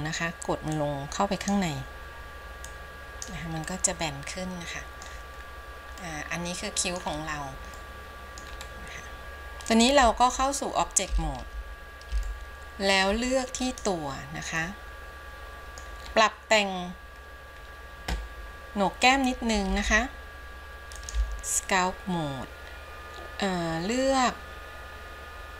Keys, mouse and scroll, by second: 0.9 click, 2.9 click, 3.9-5.3 middle drag, 5.6 scroll down 2, 6.2-7.3 middle drag, 7.3 scroll up 1, 8.0 middle click, 8.8-9.2 scroll up 1, 9.2 ctrl+Tab, 12.4-13.2 shift+middle drag, 13.4-13.8 scroll up 1, 13.8-14.2 drag, 14.7-16.1 middle drag, 16.1-17.5 scroll up 2, 17.5-18.2 scroll down 1, 20.0 ctrl+Tab.